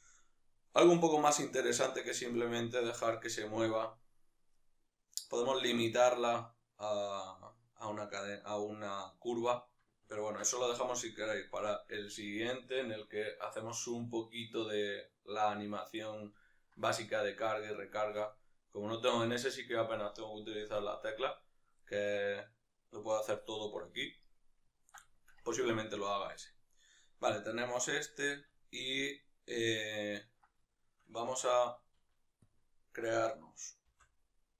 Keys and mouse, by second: 0.5 z, 25.6-26.1 right drag, 26.1-34.5 middle drag, 32.3 alt+q, 33.6 shift+d.